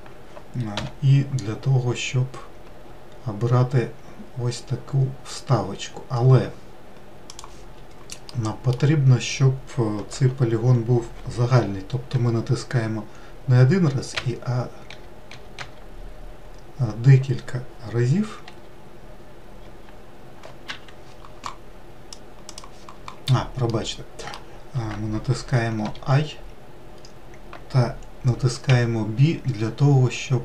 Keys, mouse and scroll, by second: 0.6 i, 8.3-11.4 middle drag, 12.1 i, 23.4-25.5 middle drag.